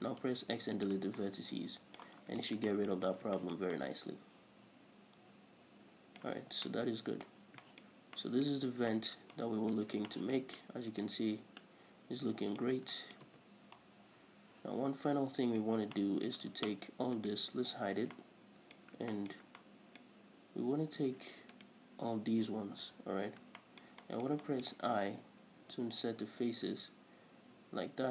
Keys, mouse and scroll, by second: 0.4 x, 1.6 middle click, 2.6 scroll down 1, 2.8 shift+middle click, 3.1 middle click, 3.4 Tab, 3.5 scroll down 1, 3.8 shift+middle click, 4.2 middle click, 6.6 a, 7.0 scroll down 1, 7.1 middle click, 7.8 scroll down 1, 8.0 shift+middle click, 8.3 shift+scroll up 1, 8.6 middle click, 9.0 scroll up 1, 9.3 shift+middle click, 9.8 middle click, 10.2 scroll up 1, 10.5 shift+middle click, 11.0 middle click, 12.0-17.6 middle drag, 12.0 scroll up 1, 13.3 scroll down 1, 13.7 Tab, 13.8-14.2 scroll up 1, 16.1 scroll up 1, 17.6 alt+right click, 18.5 h, 18.6-19.4 middle drag, 19.6-22.0 shift+middle drag, 22.0 right click, 23.3 l, 24.0-28.1 shift+middle drag.